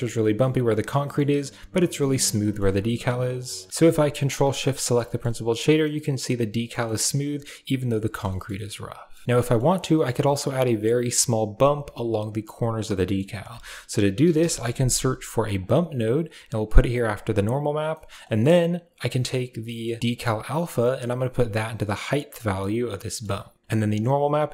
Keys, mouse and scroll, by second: 0.0 shift+middle drag, 0.5 shift+middle drag, 0.9 middle click, 2.3 middle click, 4.0 ctrl+shift+click, 4.5-4.8 middle drag, 5.0 shift+middle click, 5.2-6.6 middle drag, 6.7 shift+middle click, 7.8 middle click, 8.1 shift+middle click, 8.4 middle click, 9.3 shift+middle drag, 9.5 middle drag, 9.7 shift+middle click, 12.9 middle click, 17.5 click, 17.8 middle click, 18.1 middle click, 18.9 right drag, 19.6 middle click, 20.3-22.6 right drag, 22.6 click, 22.8 middle click, 23.5 click, 23.7 click.